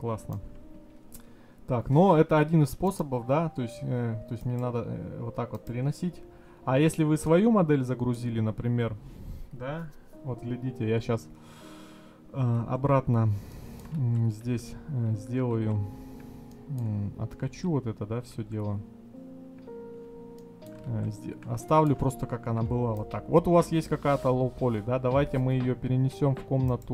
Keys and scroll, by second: 12.7 ctrl+z.